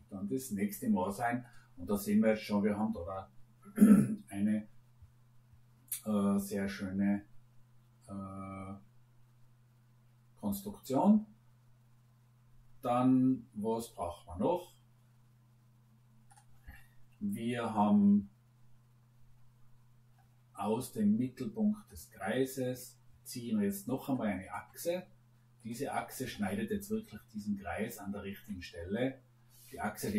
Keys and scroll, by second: 30.0 Escape.